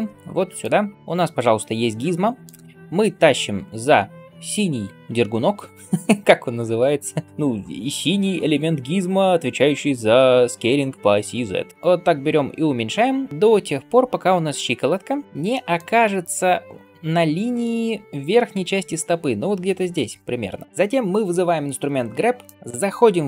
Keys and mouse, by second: 5.7-11.0 drag, 11.7-20.6 drag, 20.6 middle click, 20.6-22.5 right drag, 22.5 middle click, 22.5 n.